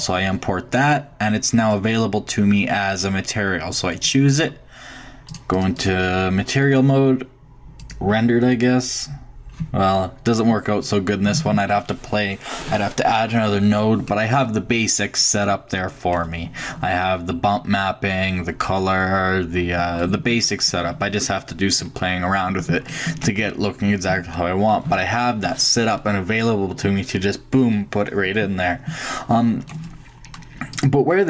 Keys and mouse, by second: 5.3-7.7 drag, 7.8-9.6 drag, 9.9-12.7 middle drag, 14.1-14.7 middle drag, 16.5 middle click, 18.4-18.9 middle drag, 22.4-23.8 shift+drag, 30.7-31.2 drag.